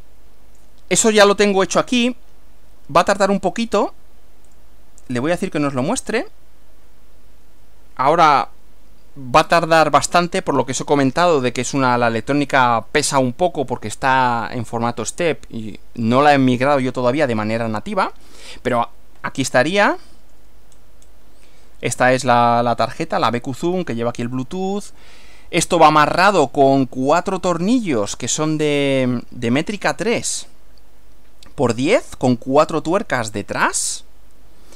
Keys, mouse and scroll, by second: 0.0 click, 3.6 click, 4.6 right click, 6.0 click, 19.4-20.6 shift+middle drag, 20.8 shift+scroll down 2, 21.1 scroll up 2, 28.0-31.9 drag, 33.7-34.7 drag.